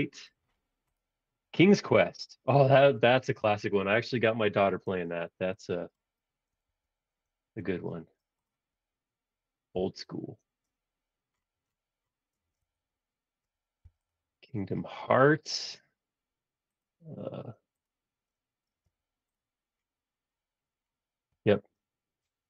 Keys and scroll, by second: 4.9 space, 6.6 shift+super+z, 7.7 super+z, 9.8 p, 12.3 space, 12.7 Escape, 13.8 m, 14.5 Up, 18.6 space.